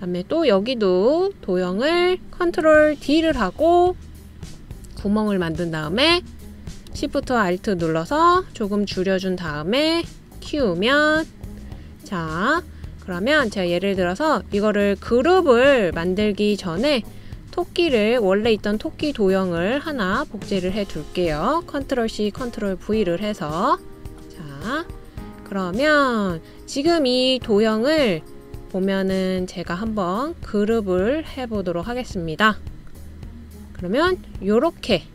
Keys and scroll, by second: 4.3 super+d, 23.3 super+c, 23.7 super+v.